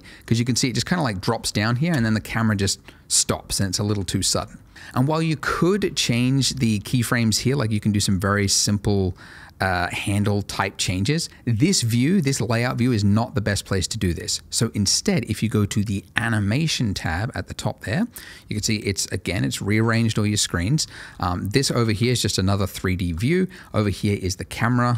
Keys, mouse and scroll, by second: 1.2 Escape, 1.9 space, 3.8 Escape, 6.5 click, 6.9 right click, 16.9 click, 20.4-21.2 scroll up 1, 21.3 shift+middle click, 21.6-22.0 shift+scroll up 2, 22.0 shift+middle click, 22.8 shift+middle click.